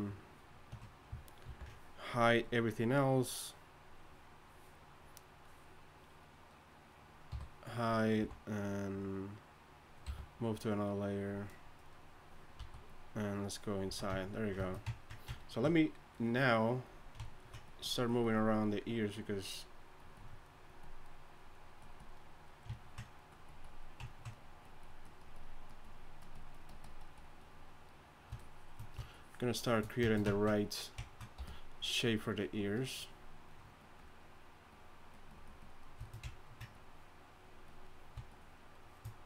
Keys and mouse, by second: 1.5 ctrl+i, 5.0-6.3 drag, 7.3 click, 7.3 h, 8.2 z, 8.6-11.2 drag, 10.0 m, 11.9 click, 12.6 a, 13.8 z, 30.4-31.0 drag, 31.4 f, 36.1-37.9 drag.